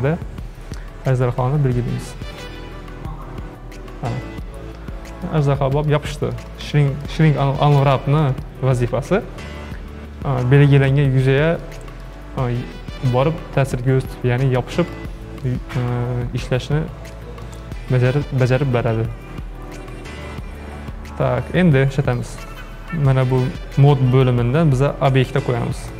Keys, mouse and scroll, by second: 4.5-5.5 middle drag, 5.5-5.9 scroll up 3, 5.9-7.3 shift+middle drag, 7.3-7.8 scroll up 3, 8.0-11.5 shift+middle drag, 11.6-16.3 shift+middle drag, 16.3-17.2 scroll down 5, 17.2-20.6 shift+middle drag, 22.5 click, 24.2-25.9 drag.